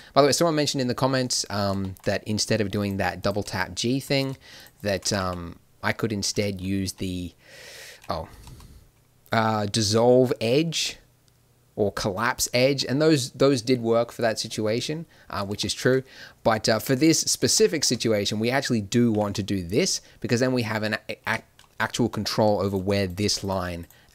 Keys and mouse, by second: 1.5-4.6 middle drag, 5.0 g, 6.9 w, 8.5 x, 15.5 middle click, 19.1 g, 22.3 click, 22.7-24.1 middle drag.